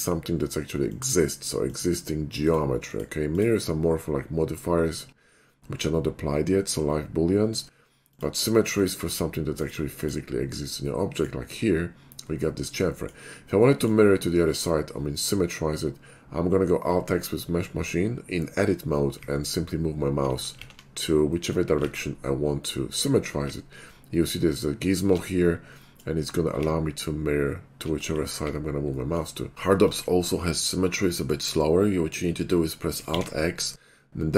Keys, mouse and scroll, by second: 0.0 click, 0.9 click, 1.6 click, 2.4 click, 2.8 click, 3.3 click, 8.1 click, 8.8 click, 9.6 click, 10.0 click, 11.1 middle click, 12.6 shift+middle click, 13.0 middle click, 13.8 middle click, 15.4 middle click, 19.2 alt+x, 19.7 alt+x, 20.6 alt+x, 21.3 middle click, 21.9 alt+x, 22.8 middle click, 23.4 alt+x, 23.9-24.9 alt+x, 25.6 middle click, 26.6-27.7 alt+x, 28.2 alt+x, 29.0 middle click, 29.5 ctrl+z, 29.9 Tab, 30.3 middle click, 30.5 middle click, 31.1 middle click, 31.9 middle click.